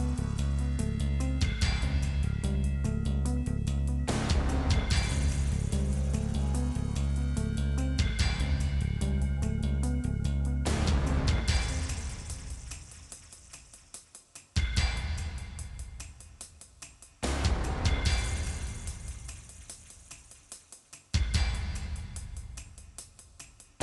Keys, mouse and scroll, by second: 1.6 middle click, 2.2-3.7 middle drag, 3.7 click, 4.2 click, 5.1 middle click, 5.6 KP_Decimal, 6.2-7.4 shift+drag, 7.4 shift+middle click, 8.0 shift+click, 8.5 scroll down 1, 8.6 middle click, 9.1 ctrl+KP_Add, 9.5-10.6 drag, 11.4 click, 12.3 click, 13.2 click, 13.4 middle click, 13.7 click, 17.2 click, 17.4 middle click, 17.6-19.3 drag, 19.4-20.6 shift+drag, 20.7 shift+click, 21.5 middle click, 21.9 shift+click, 22.3 scroll down 3, 22.4 middle click.